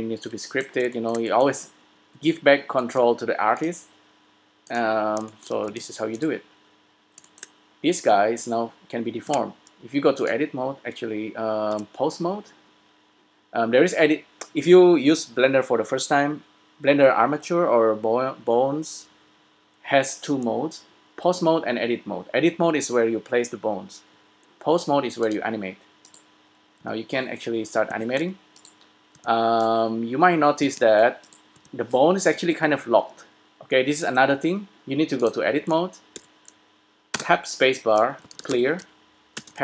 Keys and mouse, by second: 0.4 v, 5.4 middle click, 5.8 s, 9.0-10.4 middle drag, 9.7 Tab, 12.1 Tab, 26.2-28.0 drag, 26.9 g, 28.8-30.5 drag, 29.2 g, 31.5-33.0 drag, 31.8 g, 34.2 Tab, 35.8 a, 36.5 a, 37.2 space.